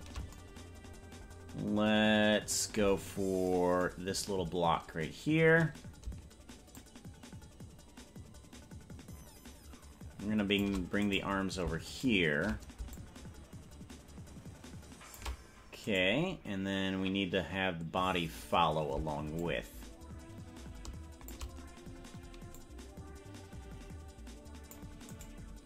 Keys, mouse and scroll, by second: 3.0-3.4 scroll down 4, 6.7-10.7 shift+drag, 11.2 right click, 12.0 shift+right click, 12.9-15.3 shift+drag, 16.1 right click, 19.4-21.5 shift+drag, 22.6-24.9 drag, 25.5 right click.